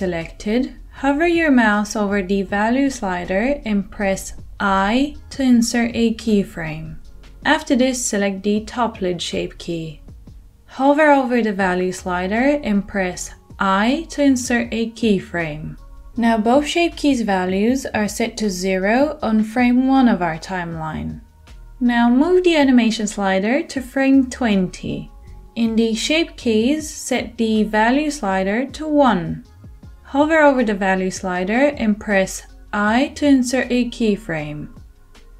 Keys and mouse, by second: 6.4 i, 8.7-22.3 middle drag, 13.4 i, 22.3-35.3 drag, 32.7 i.